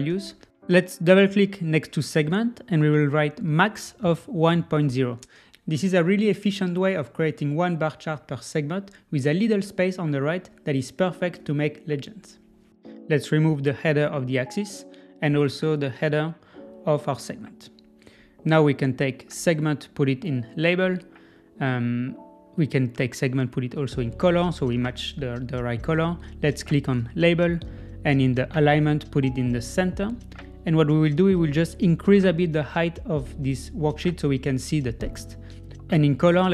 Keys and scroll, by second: 2.7 Return, 4.6 Return, 20.6 super+z.